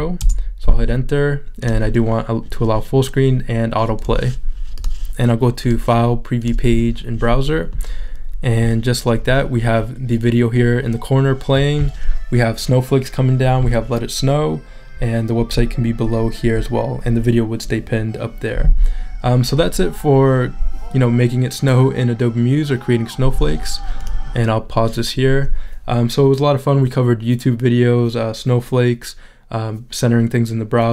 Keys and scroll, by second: 0.2 Return.